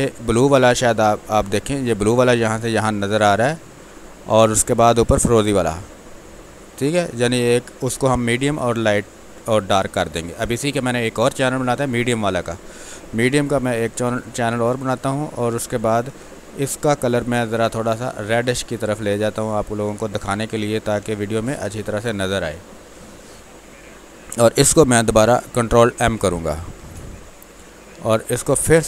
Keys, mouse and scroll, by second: 0.8 ctrl+click, 4.0 alt+click, 4.7-6.1 drag, 7.2-8.6 alt+drag, 10.6-14.4 drag, 14.4 click, 16.8 click, 21.0 space, 21.2 ctrl+click, 22.2 space, 22.4 click, 22.7 space, 23.3-27.3 ctrl+drag, 27.3 ctrl+m, 28.3-28.8 drag.